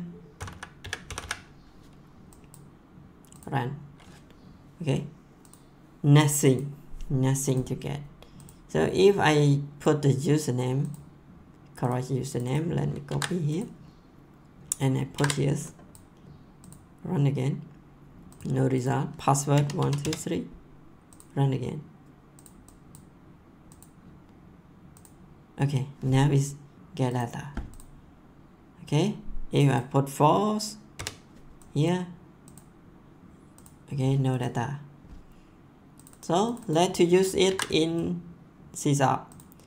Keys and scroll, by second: 0.3 ', 0.8 ,, 1.0 ', 13.0 ctrl+c, 15.1 ctrl+v, 19.3-20.5 typing, 30.9 4, 37.4 ctrl+c.